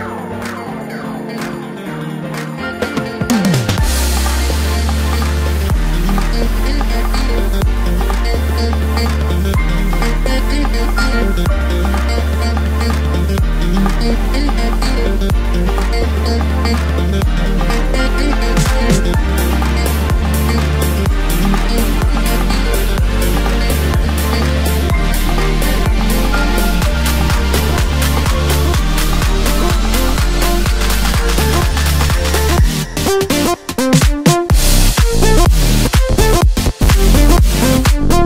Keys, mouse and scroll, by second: 0.5 Tab, 1.7-2.5 drag, 2.5-2.8 scroll down 1, 2.8 scroll up 1, 3.0 Tab, 4.0 click, 6.2 x, 7.6 Tab, 8.4 click, 8.7-9.2 scroll up 1, 9.2-9.5 scroll down 1, 9.5 Tab, 10.3 2, 10.7 click, 10.9 click, 11.5-13.5 right drag, 13.5 click, 13.7 click, 14.3 s, 16.6 KP_7, 17.1 Tab, 17.6 s, 20.5 KP_3, 21.5 ctrl+KP_8, 22.0 ctrl+KP_8, 22.1 ctrl+KP_8, 22.8-23.1 scroll up 1, 23.1 Tab, 23.4-24.4 scroll up 2, 24.4 1, 25.2 click, 25.6 shift+click, 26.1 shift+click, 26.9 j, 27.5 click, 28.2 shift+click, 28.5 shift+click, 29.4 j, 30.2 ctrl+KP_3, 31.5 click, 32.2 shift+click, 32.6 shift+click, 33.5 j, 34.0 click, 34.6 shift+click, 35.1 shift+click, 35.8 j, 36.3-37.1 scroll down 1, 37.1 KP_7, 37.7 3.